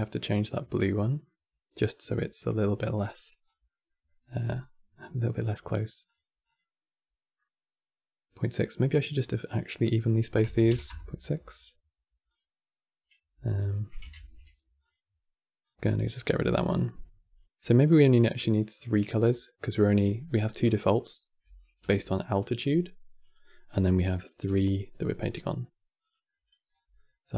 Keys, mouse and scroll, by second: 0.5 scroll down 3, 0.7-3.1 middle drag, 3.1 scroll down 4, 3.4 middle click, 4.2-5.3 scroll up 5, 5.3 click, 5.7 click, 12.0-13.1 drag, 13.1 x, 13.9 ctrl+z, 14.5-18.9 drag, 18.9 scroll down 5, 19.1 middle click, 19.9 scroll down 1, 19.9-20.3 middle drag, 20.3 click, 21.5 g, 23.3-23.7 middle drag, 23.7 click, 24.1 g, 26.0 middle click, 26.4 scroll up 5, 26.7-27.3 middle drag.